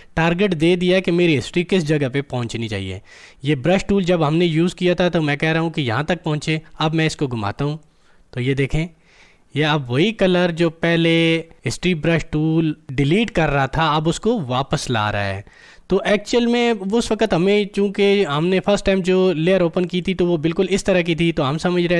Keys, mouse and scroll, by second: 8.1-11.8 drag, 19.8 click.